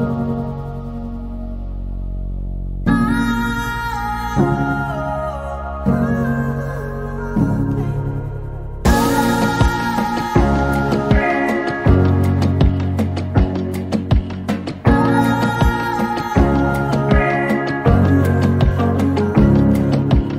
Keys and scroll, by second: 1.1 p, 3.5 k, 5.4 k, 12.8-14.3 typing, 15.6 typing, 17.5 |.